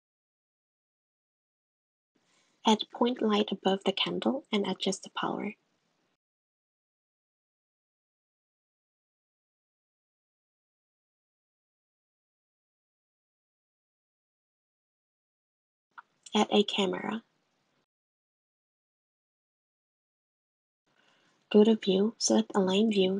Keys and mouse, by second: 1.3 shift+a, 2.7 g, 5.4 click, 10.4-11.8 drag, 11.9 drag, 12.5 click, 15.0 shift+a, 20.4 click, 22.3-23.1 drag.